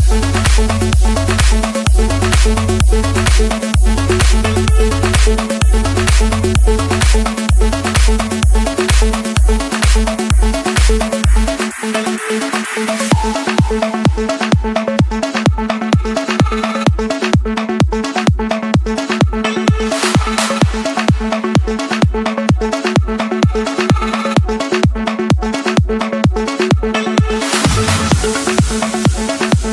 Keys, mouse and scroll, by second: 1.0-2.1 drag, 3.9-6.1 typing, 6.8 Return, 7.8 click, 8.2 Return, 11.3 Escape, 12.5 click, 13.3 click, 13.6-14.8 scroll, 15.7 click, 17.0 click, 18.1 click, 19.7 click, 20.0 Escape, 21.0 click, 23.0 click, 24.2-24.8 scroll, 24.8-25.3 scroll, 27.3-29.7 typing, 29.3 Return.